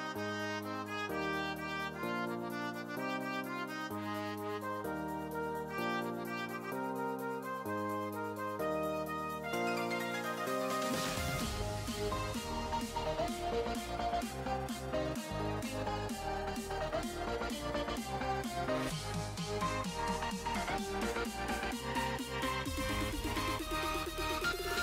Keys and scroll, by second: 21.1 BackSpace.